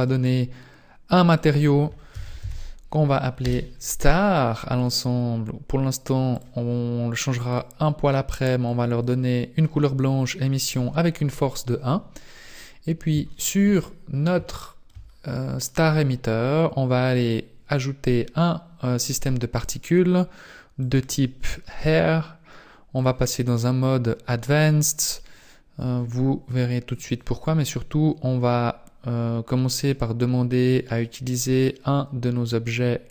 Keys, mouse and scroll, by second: 0.1 click, 3.4 click, 6.8 click, 8.8 click, 12.3 right click, 13.3 shift+middle click, 13.8 middle click, 14.5 shift+middle click, 15.1-15.5 scroll down 2, 15.6 middle click, 18.1 click, 20.9 click, 22.9 click, 27.5-29.0 scroll down 9, 29.8 click.